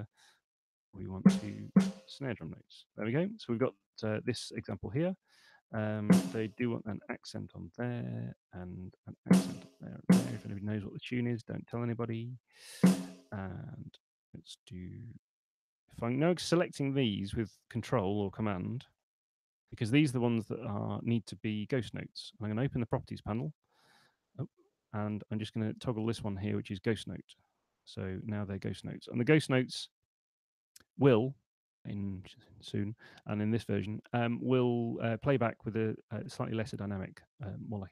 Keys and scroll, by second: 0.6 6, 2.8 Escape, 6.7 [, 9.5 [, 22.9 super+8, 27.7 super+8.